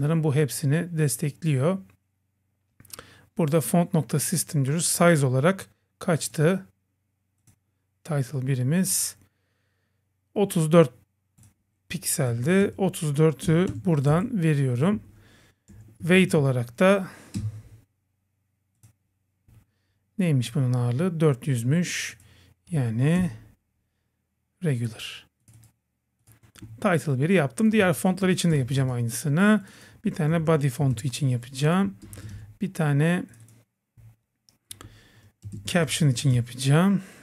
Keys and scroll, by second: 14.1 Right, 15.0 Left, 17.4 Return, 27.8 super+c, 28.5 Return, 28.8 super+v, 32.1 Return, 32.3 super+v.